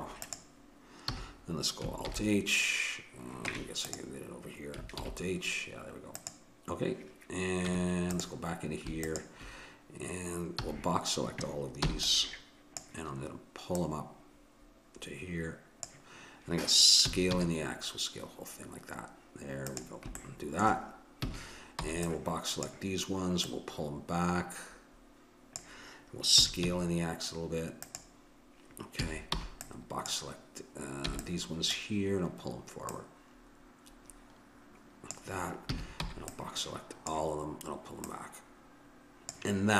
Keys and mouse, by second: 1.1 a, 2.0 alt+h, 3.5 Tab, 4.9 alt+h, 7.7 Tab, 10.6 a, 11.9 b, 13.8-15.8 drag, 17.0 s, 21.2 a, 21.8 b, 23.4-24.9 drag, 26.3 s, 28.9 a, 29.4 b, 31.1 b, 32.9-35.1 drag, 35.7 a, 36.1 b, 38.1-39.7 drag.